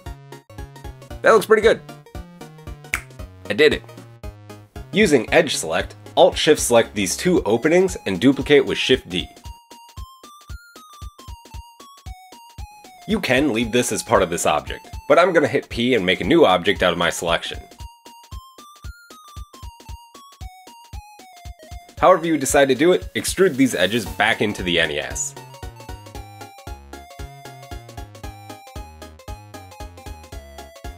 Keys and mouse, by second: 0.5 Tab, 1.2-1.9 middle drag, 3.4 middle click, 4.6 Tab, 5.5 alt+click, 7.1 middle click, 8.6 alt+shift+click, 9.8 shift+d, 10.4-11.5 drag, 11.5-12.4 middle drag, 12.4 click, 17.7 p, 17.8 middle click, 17.9 click, 18.4 Escape, 18.9 Tab, 19.5 click, 20.0 Tab, 20.2 a, 21.1 middle click, 21.7-23.0 drag, 21.9 KP_3, 22.2 KP_1, 23.0-27.5 middle drag, 23.6 e, 24.1 g, 30.8 alt+shift+middle click.